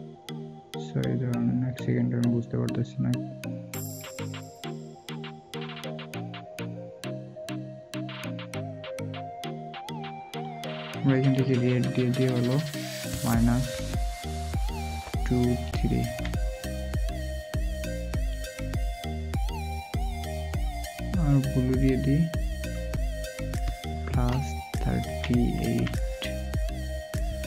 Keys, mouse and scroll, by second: 13.5 typing, 14.8 typing.